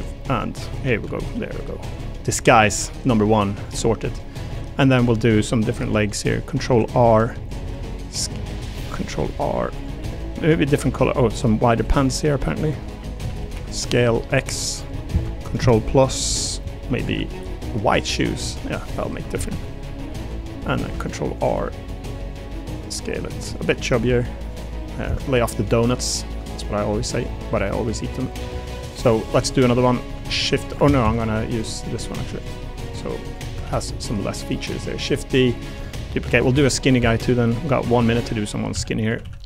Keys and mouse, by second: 0.5 l, 1.0 a, 1.2 g, 2.2 click, 2.7 click, 3.8 click, 4.0 click, 4.9 3, 5.1 a, 5.3 a, 6.7 ctrl+r, 7.7 s, 8.5 a, 9.0 ctrl+r, 9.7 click, 10.0 s, 11.3 click, 11.8 3, 12.1 click, 12.6 click, 12.9 shift+click, 13.2 s, 13.5 x, 13.5 z, 14.0 x, 14.7 click, 17.0 a, 17.3 g, 18.0 click, 19.1 3, 19.3 a, 19.5 a, 19.8 click, 20.1 3, 20.8 ctrl+r, 21.3 click, 21.6 s, 23.5 click, 23.9 r, 24.5 click, 25.0 Escape, 25.6 click, 25.8 middle click, 26.2 middle click, 26.5 shift+middle click, 26.9 3, 27.1 click, 27.3 click, 28.5 click, 29.3 Tab, 30.3 shift+d, 30.8 ctrl+z, 31.0 ctrl+z, 32.0 click, 32.3 click, 32.8 click, 33.6 shift+d, 35.2 click, 35.8 Tab, 36.2 3, 36.5 a, 38.0 click, 38.7-39.4 typing.